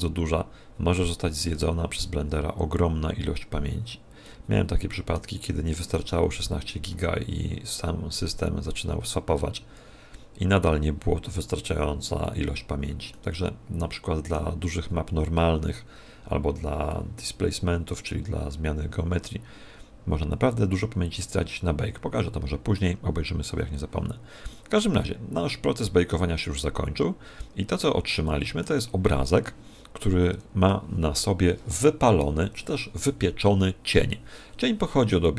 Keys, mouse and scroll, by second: 4.2 middle click, 13.1 middle click, 28.2 middle click.